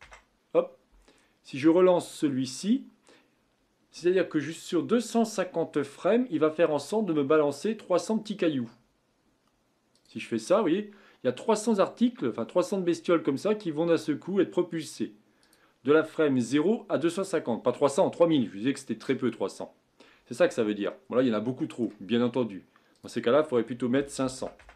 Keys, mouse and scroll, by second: 2.0-5.2 drag, 9.9-13.0 drag, 15.6-18.5 drag, 20.6-22.9 middle drag, 22.9-24.4 drag, 24.4 KP_0.